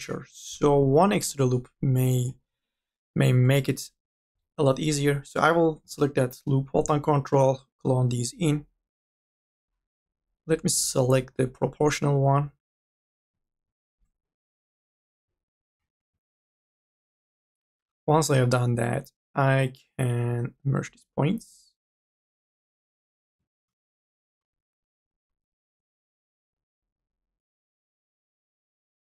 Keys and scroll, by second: 1.1-2.0 typing, 4.2 m, 4.6 o, 13.5 ctrl+z, 16.0 ctrl+z, 18.0 1.